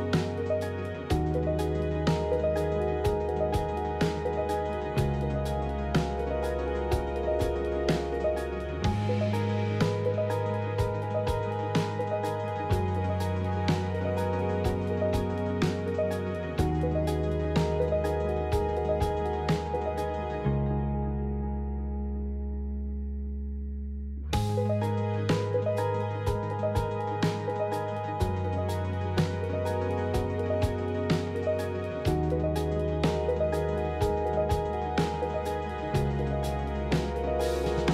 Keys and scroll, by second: 0.3 1, 1.7 1, 4.2 s, 9.0 s, 15.2 ctrl+z, 20.0 alt+x, 22.4 i, 25.4 z, 30.6 F4, 32.8 i, 37.5 ctrl+z.